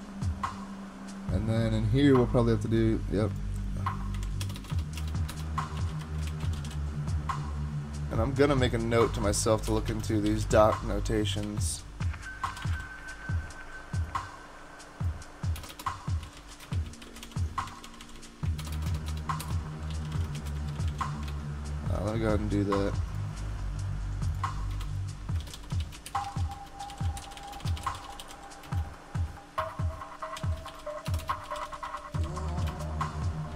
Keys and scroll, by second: 4.4 alt+BackSpace, 4.6 alt+BackSpace, 4.7 alt+BackSpace, 5.4-7.1 typing, 9.6-11.1 typing, 12.2-13.2 typing, 15.6-17.7 typing, 17.7 super+Right, 18.0 Left, 18.2 Left, 18.6 alt+BackSpace, 18.7 alt+BackSpace, 18.9 alt+BackSpace, 19.5-21.4 typing, 24.7 Return, 25.3-28.8 typing, 30.1-33.5 typing.